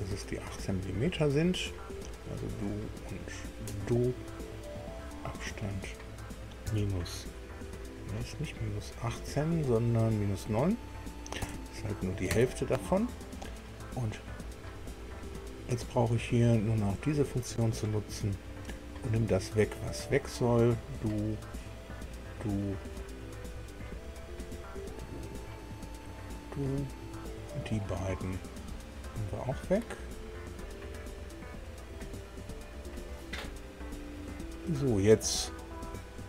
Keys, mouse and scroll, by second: 1.3 click, 3.5 click, 5.0 click, 6.6 KP_Subtract, 11.4 KP_9, 12.3 KP_Enter, 17.1 click, 19.7 click, 21.9 click, 24.0 click, 25.9 click, 27.5 click, 29.9 click.